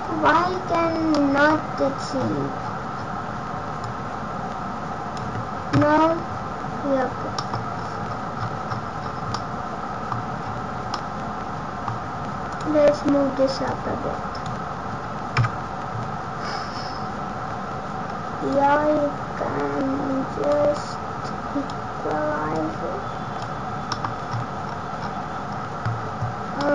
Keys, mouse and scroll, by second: 0.0 scroll down 2, 0.6-1.8 scroll down 8, 1.1 middle click, 2.6-3.0 scroll down 11, 3.7 scroll down 7, 3.8 click, 5.7 KP_0, 7.3 middle click, 7.7 scroll down 1, 8.2-8.8 scroll down 27, 9.3 middle click, 9.3-10.0 scroll down 8, 10.2 scroll up 1, 10.9 middle click, 10.9 scroll up 6, 12.5 click, 13.6 click, 15.3 KP_0, 18.5 click, 20.7 click, 22.5 click, 23.9 middle click, 24.3-24.8 scroll down 9, 26.5 middle click, 26.5 scroll down 12.